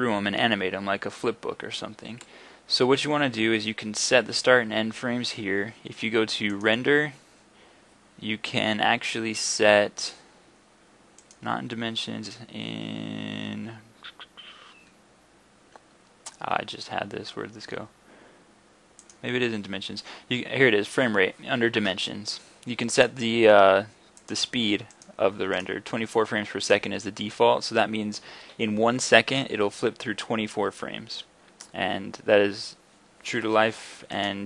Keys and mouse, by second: 6.5-26.7 drag.